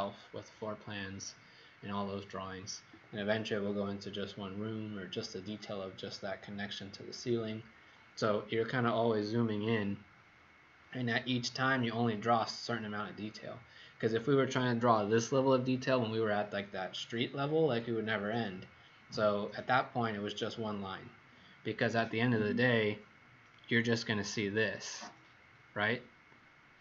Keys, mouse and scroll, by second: 23.4 click.